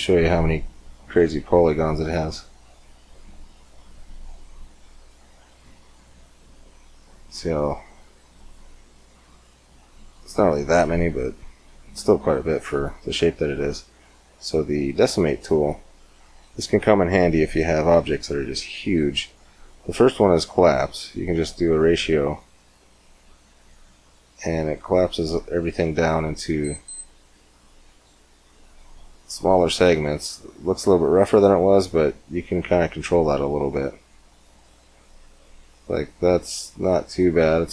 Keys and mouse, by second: 1.2-3.0 middle drag, 3.3-5.1 drag, 5.4 Tab, 10.3 middle click, 12.7 Tab, 14.4-22.7 drag, 28.9-31.7 middle drag, 31.7-33.7 drag, 37.5-37.7 middle drag.